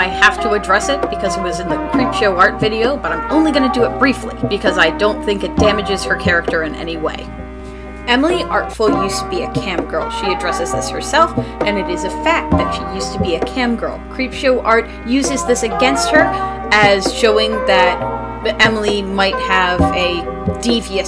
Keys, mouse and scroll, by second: 7.0 space.